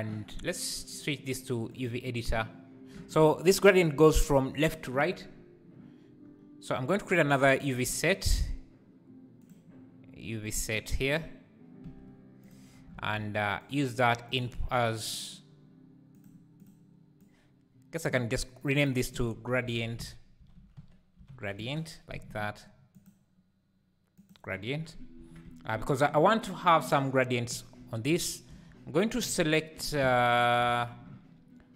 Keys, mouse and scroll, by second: 1.8-11.8 drag, 11.8 n, 12.4-16.3 drag, 16.3 shift+a, 18.1 click, 18.6 click, 18.8-21.8 drag, 24.3 click, 25.2 Tab, 28.7 z, 30.7 alt+a.